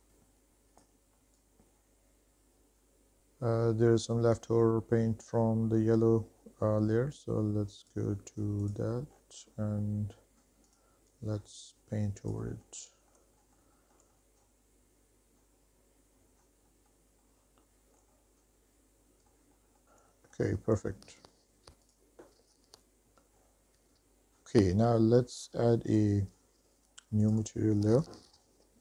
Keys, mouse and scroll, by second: 1.7 middle click, 1.8 shift+middle click, 2.1 middle drag, 2.3 shift+middle drag, 2.4 middle click, 2.6 shift+middle drag, 2.8 middle drag, 3.1-4.0 scroll up 2, 4.0-4.7 scroll down 2, 5.1 shift+middle drag, 5.8 scroll down 2, 7.3 scroll up 1, 8.0 click, 8.8 click, 9.3-10.3 scroll down 3, 10.9 click, 11.7 click, 12.7 middle click, 13.0 shift+middle click, 13.4 middle click, 13.5 shift+middle click, 13.7 middle click, 14.5 shift+middle click, 14.7 shift+middle click, 15.1 middle click, 15.5 shift+middle click, 15.8 shift+middle click, 16.0 middle click, 16.1 click, 16.5 middle click, 16.7 shift+middle click, 17.0 click, 17.2 shift+middle click, 17.4 shift+middle click, 17.8 middle click, 18.0 shift+middle click, 18.2 shift+middle click, 18.5 scroll down 3, 18.6 shift+middle click, 18.9 middle click, 19.0 scroll up 2, 19.2 middle click, 19.3 shift+middle click, 19.5 middle click, 19.8 middle click, 19.9 shift+middle click, 20.3 middle click, 22.0 click, 23.6-23.9 scroll up 2, 23.9 shift+middle click, 26.1 click, 27.6-28.8 drag.